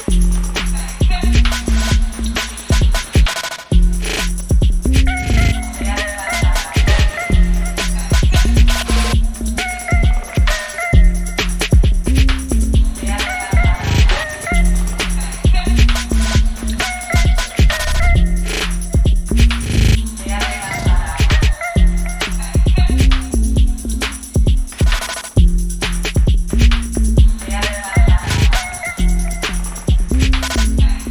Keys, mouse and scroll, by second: 2.4 0, 2.6 Return, 3.1-9.1 drag, 9.3-12.6 drag, 12.7 1, 13.3 5, 13.5 Return, 14.2 click, 14.8-15.7 typing, 15.6 click, 17.3-24.6 drag, 24.6-25.8 typing, 26.6-31.1 drag.